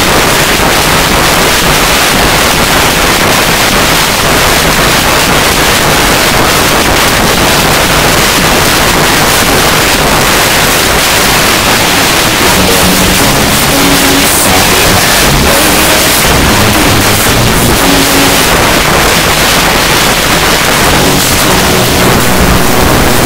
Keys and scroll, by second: 2.6 s, 2.7-3.8 Down, 4.0 Down, 4.2 Down, 4.3 Down, 4.5 Down, 5.0 Down, 5.1 Down, 5.5 Down, 5.7 Down, 5.8 Return, 18.4 Page_Down.